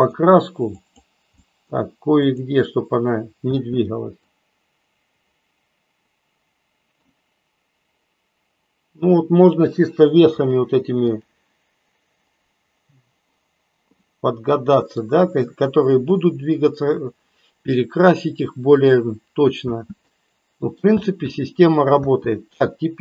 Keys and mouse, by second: 0.8 click, 1.4 middle click, 3.4 space, 4.4-7.2 middle drag, 10.5-11.2 drag, 14.2 middle click, 19.8 space, 20.0-20.8 middle drag, 20.9 space, 22.0 space.